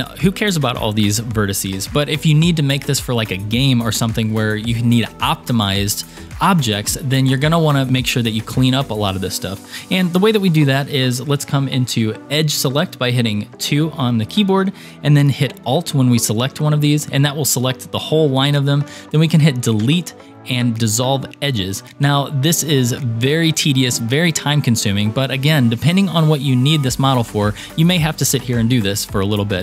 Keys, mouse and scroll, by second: 12.7 2, 13.6 2, 16.7 alt+click, 19.9 Delete.